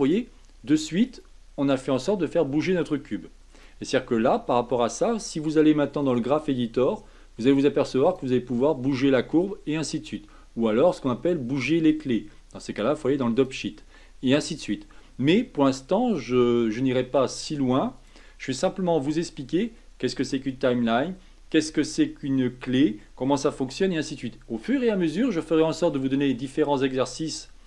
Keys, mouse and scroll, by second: 0.0-8.1 drag, 18.1-27.6 drag.